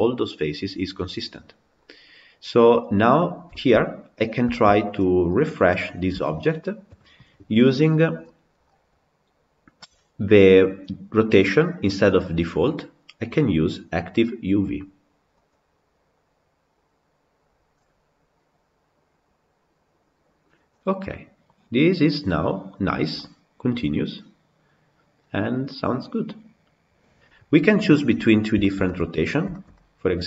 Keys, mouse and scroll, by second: 2.8 click, 3.4-4.1 shift+middle drag, 4.1 scroll down 3, 4.4-5.3 shift+middle drag, 5.3 click, 6.0 KP_Decimal, 19.3-20.8 drag, 20.8-22.7 middle drag, 22.7-23.0 scroll up 3, 23.0-26.0 middle drag, 28.0-28.5 scroll down 2, 28.5-29.0 shift+middle drag, 29.0 scroll up 3, 29.4-30.2 shift+middle drag.